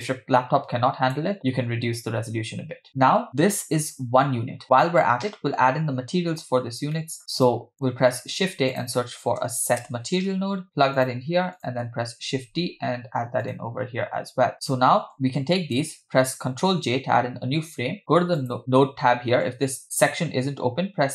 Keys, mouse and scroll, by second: 0.1-1.3 drag, 2.9 middle click, 2.9-3.2 scroll down 3, 5.0 middle click, 7.0 middle click, 7.2 drag, 7.7 click, 8.1 shift+a, 11.6 click, 12.3 shift+d, 14.5 click, 15.1-15.8 drag, 15.1-15.8 scroll down 2, 16.8 ctrl+j, 18.4 click.